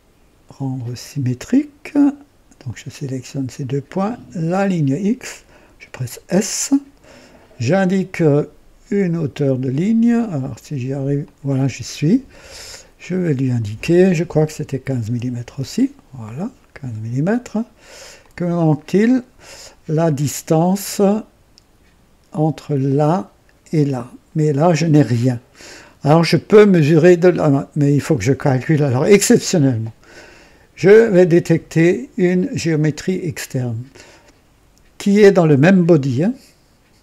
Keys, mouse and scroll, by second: 0.8 click, 2.6 click, 4.4 click, 5.9 s, 11.1 click, 12.9 click, 14.8 KP_1, 15.1 KP_5, 15.4 KP_Enter, 18.1-19.2 drag, 22.9 click, 32.7 click.